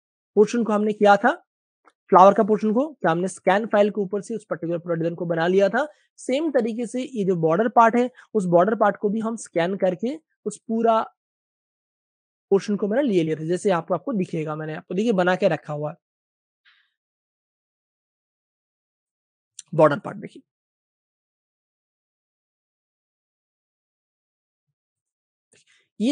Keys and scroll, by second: 1.5 super+space, 1.6 super+space, 1.9 v, 7.6 super+space, 7.7 super+space, 8.3 space, 8.9 super+space, 9.4 v, 10.8 super+space, 12.4 typing, 19.6-20.8 typing, 21.8 super+space, 25.9 space.